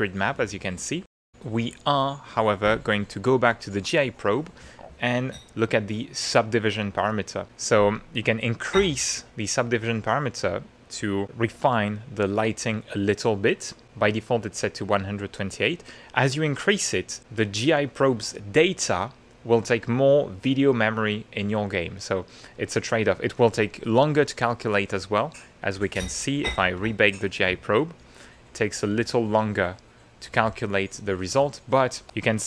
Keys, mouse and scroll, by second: 0.5 ctrl+middle click, 3.5 click, 5.0 middle click, 14.4 click, 16.3 middle click, 17.6 middle click, 17.8 click, 26.8 click, 28.9 click, 29.1-30.4 middle drag, 31.5 ctrl+middle click, 32.2 ctrl+middle click.